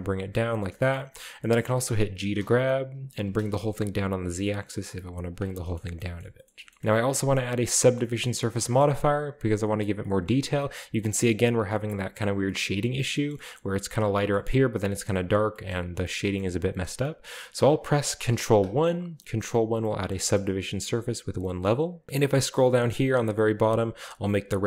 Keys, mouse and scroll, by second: 1.0-1.3 scroll up 2, 2.4 g, 3.2 z, 5.3 shift+drag, 5.5-6.5 scroll down 2, 5.8 a, 6.1 middle drag, 6.4-6.8 shift+middle drag, 6.7 shift+scroll up 1, 6.8 ctrl+alt+Left, 7.4-9.4 middle drag, 7.4-9.7 scroll up 1, 10.0 middle click, 10.3-10.9 middle drag, 11.3 right click, 11.7-12.1 middle drag, 12.5 middle drag, 13.1 shift+middle click, 13.3 shift+middle click, 13.6-15.4 middle drag, 15.4-16.5 scroll down 2, 15.6-17.0 middle drag, 18.3 ctrl+1, 18.9-19.2 ctrl+middle drag, 20.5-21.4 scroll up 1, 22.1-22.9 scroll down 2, 24.0 click.